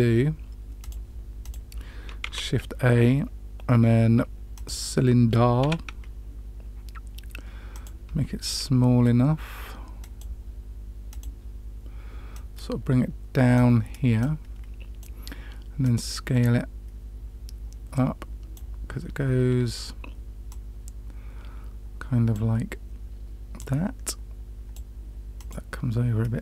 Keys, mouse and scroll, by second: 0.7 click, 1.4 click, 2.2 shift+a, 5.5 s, 9.9 click, 11.0 click, 12.3-13.5 drag, 14.1-14.9 drag, 15.7-18.5 drag, 20.4-22.3 drag, 23.5 click, 25.3 click, 26.3-26.4 drag.